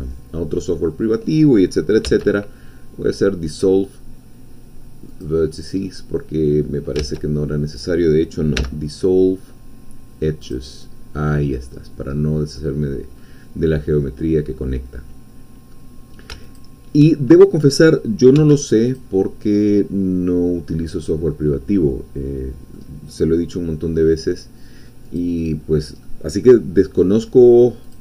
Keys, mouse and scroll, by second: 2.0 x, 5.1 click, 5.8-7.1 middle drag, 7.1 ctrl+z, 8.6 x, 10.4 click, 11.1-13.2 middle drag, 13.2-13.5 scroll up 1, 13.8-15.9 middle drag, 16.6 alt+shift+click, 18.4 x, 18.9 click, 19.6-24.2 middle drag, 25.0 click, 26.0-27.0 middle drag, 27.2-27.8 scroll up 1, 27.8 click.